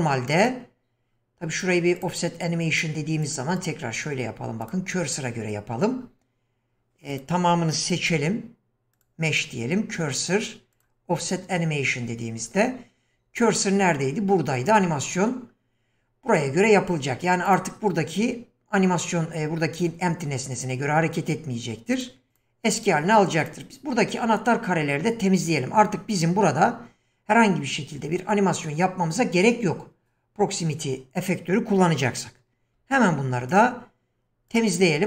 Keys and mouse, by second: 2.1-3.4 drag, 3.6-4.7 drag, 7.1 click, 8.0 q, 14.8 click, 17.5 click, 22.0 click, 22.3 click, 23.4 click, 32.7 x.